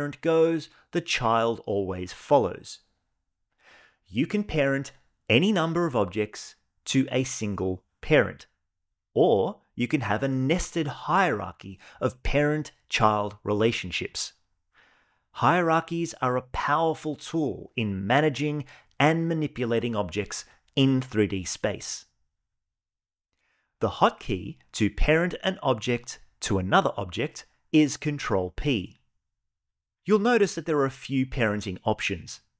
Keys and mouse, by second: 4.3 shift+click, 4.5 shift+click, 5.1 shift+click, 5.6 ctrl+p, 6.4 click, 6.8 g, 7.9 shift+drag, 8.4 ctrl+p, 9.5 shift+click, 10.1 ctrl+p, 11.6-12.5 middle drag, 12.9 g, 15.6 click, 15.8 g, 17.1 right click, 17.6 click, 17.9 g, 28.5 ctrl+p.